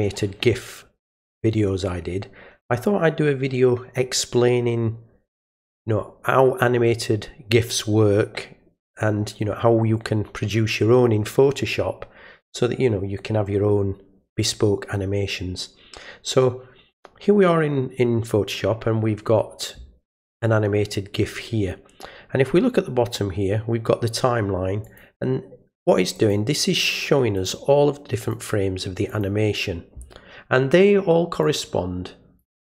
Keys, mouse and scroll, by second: 24.8 click, 26.2 click, 27.4 click, 28.2 click, 29.1 click, 31.4-32.4 drag.